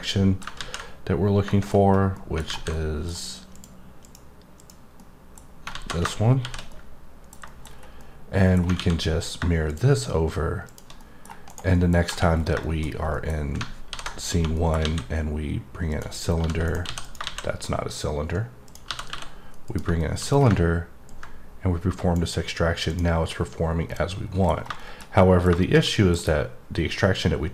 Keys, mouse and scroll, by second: 0.0 middle click, 1.5 middle click, 1.8 scroll up 2, 2.1 middle click, 2.7 middle click, 3.5 click, 4.0 click, 4.6 click, 4.9 middle click, 6.7 middle click, 7.4 double middle click, 7.7-8.0 scroll up 1, 8.0 middle click, 9.7 click, 10.7 click, 11.0 middle click, 11.4 right click, 11.7 middle click, 12.3-13.1 scroll down 4, 12.6 middle click, 13.1 middle click, 14.5 middle click, 15.9 click, 16.6 right click, 17.0 click, 18.6 click, 19.6 click, 20.0 middle click, 20.4-21.1 scroll up 2, 21.1 click, 22.9 click, 23.9 middle click, 24.5 scroll down 1, 24.8 middle click, 25.2 middle click, 25.6 double middle click, 25.9-27.5 middle click.